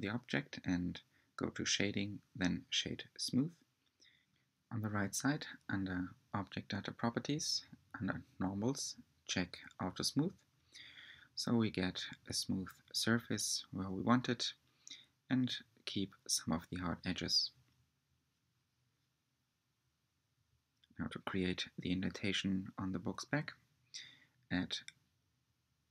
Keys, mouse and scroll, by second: 0.7 scroll up 1, 2.7-4.4 right drag, 4.7 click, 6.9 click, 7.6 scroll down 5, 8.8 click, 9.8-15.7 middle drag, 15.9 click, 16.8 click, 18.5 r, 24.8 scroll up 2, 25.7 r.